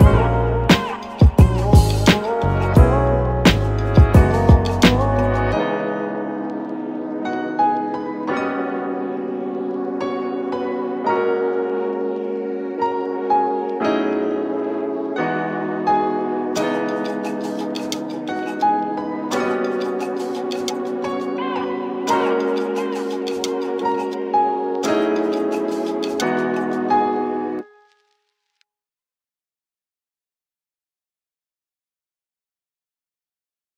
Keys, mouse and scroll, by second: 0.3 scroll up 5, 5.1-7.4 scroll up 1, 7.4-8.2 scroll up 1, 8.2-11.7 drag, 14.1 click, 18.7-19.8 drag, 26.8-27.3 scroll down 1, 27.3-28.2 scroll down 4, 28.2-33.7 middle drag.